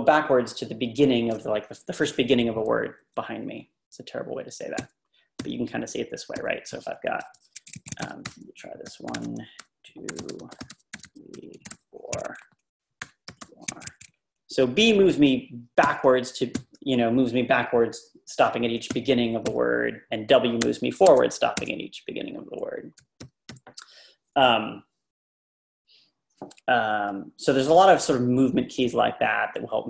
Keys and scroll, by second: 4.8 b, 7.2 Page_Down, 7.7-14.1 typing, 15.8 b, 18.9 b, 20.7-21.6 typing, 23.0-23.4 typing.